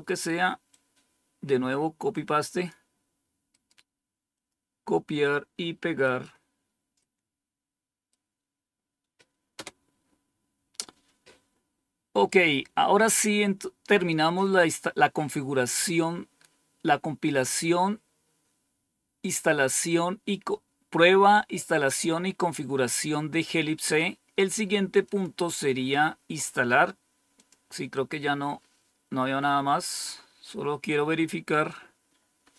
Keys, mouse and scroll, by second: 0.6-2.6 drag, 3.4 right click, 4.3 click, 9.5 Return, 14.0 scroll down 1, 15.4-23.4 scroll down 2, 23.4-25.0 scroll down 1, 25.0 click, 27.3 click, 28.5-32.5 scroll down 12.